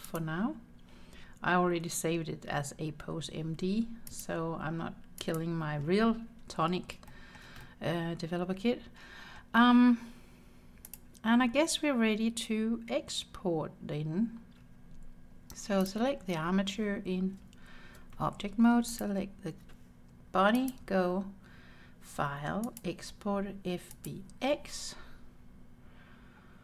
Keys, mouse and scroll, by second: 0.1-1.1 drag, 4.1-5.5 drag, 6.5-7.0 scroll down 1, 7.1 shift+middle click, 7.7-9.4 middle drag, 10.9 click, 15.0-15.9 scroll up 2, 15.9-17.4 drag, 17.4 Tab, 18.9 shift+click, 20.6-24.2 drag.